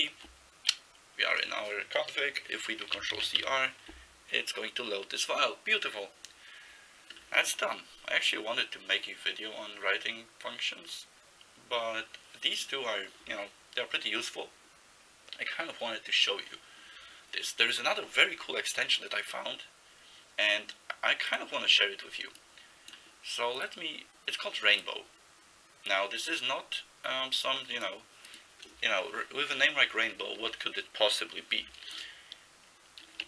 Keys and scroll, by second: 3.2 ctrl+c, 3.4 r, 33.1-33.2 typing.